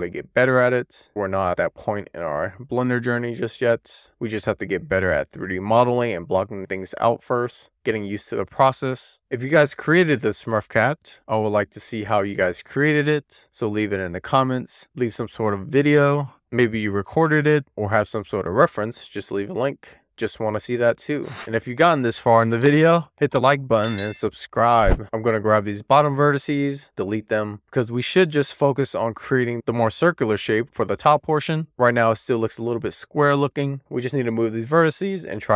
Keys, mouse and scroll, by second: 0.1 click, 0.7 click, 1.2 super+z, 1.5 super+z, 1.6 super+z, 1.8 click, 2.3 super+z, 2.7 scroll down 2, 2.9 scroll up 1, 3.0 alt+z, 3.5 alt+z, 4.4 alt+z, 4.6 alt+z, 5.4 ctrl+r, 5.6 right click, 5.9 click, 6.2 alt+z, 6.3 scroll up 2, 6.5 alt+z, 7.0 alt+z, 7.1 click, 7.5 click, 7.9 alt+z, 8.0 alt+z, 8.2 click, 8.8 alt+z, 9.3 alt+z, 9.5 alt+z, 9.9 click, 10.1 alt+z, 10.3 alt+z, 11.1 alt+z, 11.3 alt+z, 11.6-12.0 scroll down 1, 12.0 alt+z, 12.4 alt+z, 12.6 middle click, 12.7 scroll down 5, 13.0 shift+middle click, 13.5 scroll up 2, 13.6-15.1 middle drag, 15.2 ctrl+r, 15.6 right click, 15.7 middle click, 16.0 scroll down 1, 16.0 shift+middle click, 16.1 scroll up 1, 16.4 middle click, 16.8-17.2 scroll up 1, 17.2 scroll down 1, 17.3-18.7 middle drag, 19.5 middle click, 20.0 scroll up 1, 20.3 scroll down 1, 20.6 middle click, 21.4-22.1 scroll up 2, 22.1 middle click, 23.0 middle click, 23.8 middle click, 24.1 shift+middle click, 24.2 shift+scroll down 2, 24.8 alt+middle click, 24.9 alt+z, 25.0 scroll up 2, 25.3 alt+z, 25.5 click, 25.7 x, 25.9 alt+z, 26.0 middle click, 26.9 middle click, 27.2-27.6 scroll up 1, 27.6 click, 28.0 click, 28.2 g, 28.7 shift+middle click, 29.2-29.6 scroll up 1, 29.6 middle click, 30.4 alt+shift+click, 30.6 middle click, 31.6 click, 31.8 click, 32.1 g, 32.5 click, 34.3 click, 35.3 click.